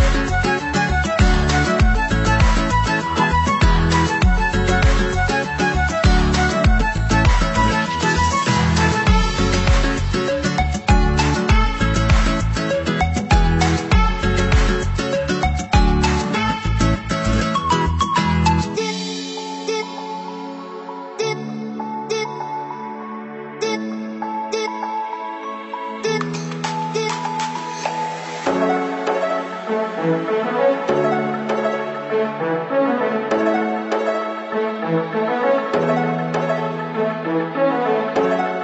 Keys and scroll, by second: 18.9 Delete.